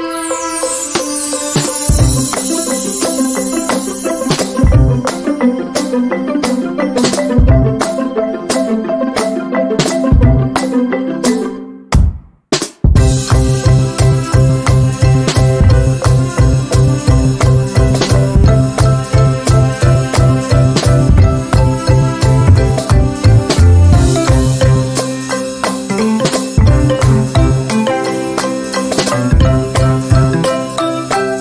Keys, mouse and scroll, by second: 0.1-8.0 drag, 10.5 shift+scroll down 1, 11.9 click, 14.5 z, 15.7-17.0 drag, 18.3 ctrl+d, 18.4-20.3 drag, 20.3 z, 20.7-22.4 drag, 24.9-29.6 drag, 29.6-31.4 drag.